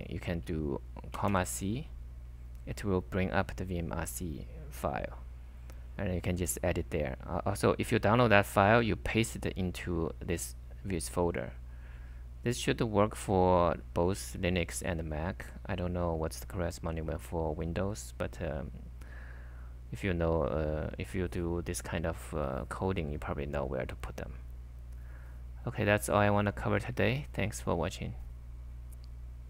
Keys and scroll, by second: 1.0-2.0 typing, 3.3-4.1 typing.